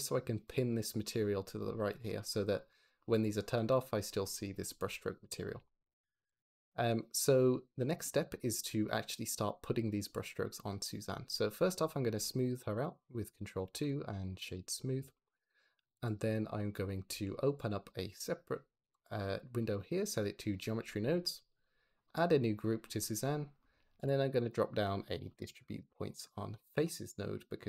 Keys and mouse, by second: 0.4 click, 0.6 click, 2.4 click, 3.1 click, 5.4 shift+middle click, 6.1 click, 6.5 click, 12.1 ctrl+2, 13.8 click, 15.9 click, 17.4 click, 18.9-20.6 drag, 21.5 click, 21.9 click, 23.8 shift+a.